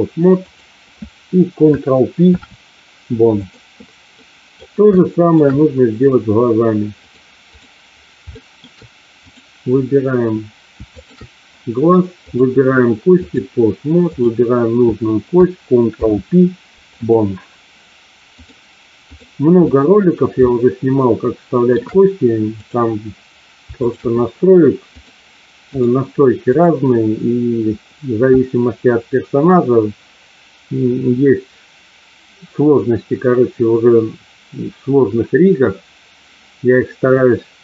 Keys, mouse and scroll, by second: 0.4 click, 2.1 ctrl+p, 4.1 middle click, 4.9-5.3 shift+middle drag, 7.0-7.6 drag, 8.4 shift+middle click, 10.9 shift+click, 12.3-13.4 drag, 14.1 click, 15.9 ctrl+p, 18.3-19.3 drag, 19.6 middle click, 20.4-21.8 shift+middle drag, 22.4 click, 25.0 click, 26.5 click.